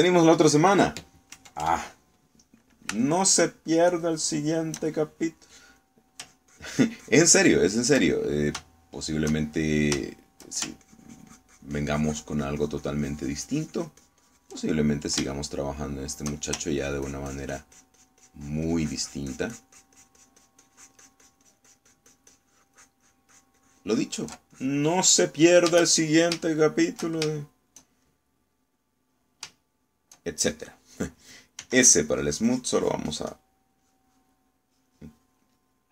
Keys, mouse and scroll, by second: 2.4 KP_Add, 4.1-6.0 shift+middle drag, 6.8 click, 7.3-9.2 ctrl+drag, 9.2-11.0 ctrl+middle drag, 11.2 shift+middle click, 11.9-15.7 ctrl+shift+drag, 15.7 ctrl+middle click, 16.7 shift+middle click, 17.9-25.5 ctrl+drag, 25.6-26.7 ctrl+drag, 27.5 shift+middle click, 28.4 shift+middle click, 29.8 middle click, 30.8 shift+middle click, 32.6 s, 33.1-34.6 drag, 34.9 click, 35.8 click.